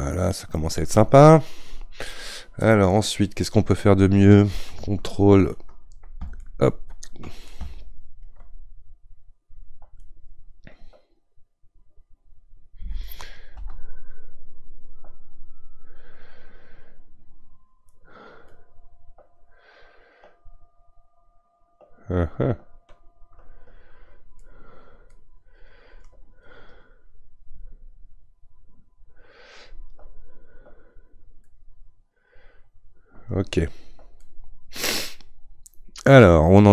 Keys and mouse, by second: 25.1-28.0 drag, 28.0 ctrl+=, 28.1 ctrl+=, 28.2 ctrl+=, 28.4 ctrl+-, 28.5 ctrl+-, 28.7 ctrl+-, 31.4-36.7 middle drag.